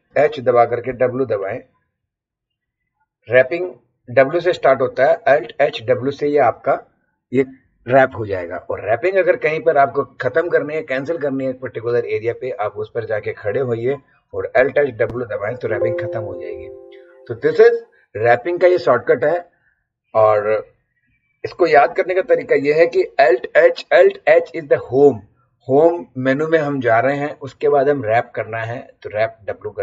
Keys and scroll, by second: 0.1 alt+h, 0.9 w, 14.6 alt+h, 15.0 alt+w.